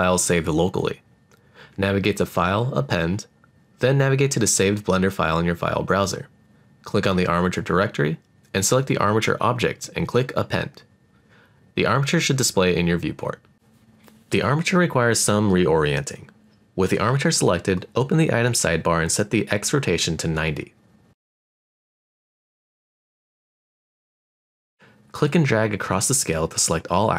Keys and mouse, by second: 1.7-3.2 drag, 13.1-15.9 middle drag, 18.4 click, 20.4 click, 23.2-25.7 drag.